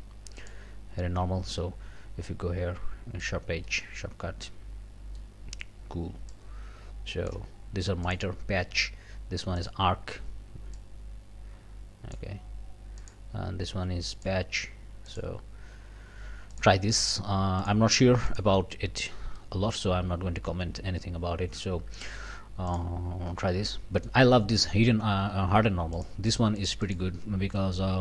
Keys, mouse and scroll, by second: 0.4 click, 1.4 scroll down 1, 1.6-3.4 drag, 3.4 scroll up 1, 3.7-5.4 middle drag, 6.3-7.5 drag, 8.1 click, 9.6 click, 10.8-12.4 drag, 13.0 click, 14.2 click, 15.1 click, 16.5 click, 17.6 click, 18.3 click, 19.4 click, 22.7 click, 23.5 scroll up 1, 24.0 click, 25.9-27.1 drag, 27.3-27.6 scroll up 1, 27.9 scroll down 1.